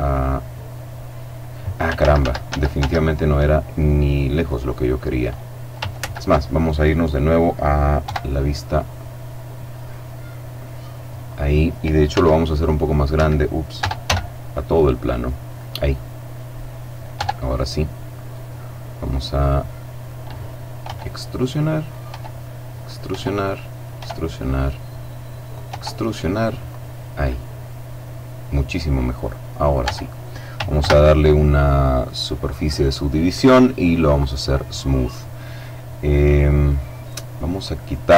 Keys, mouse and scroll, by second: 1.8 ctrl+z, 3.6 ctrl+middle click, 3.8-4.8 right drag, 5.8 ctrl+z, 7.8 KP_7, 9.7-11.2 middle drag, 11.2-11.7 scroll down 1, 12.0 s, 13.0 Escape, 13.6 Tab, 13.8 s, 15.3 click, 16.5 middle click, 16.9 Tab, 17.3-20.6 middle drag, 20.6 e, 21.7 click, 21.9 e, 22.6 click, 22.9 e, 23.6 click, 23.7 e, 25.3 click, 25.5 e, 26.5 click, 26.9 middle click, 29.0 middle click, 29.6 Tab, 30.6 ctrl+2, 33.9 click, 35.4-36.4 middle drag, 37.6 right click.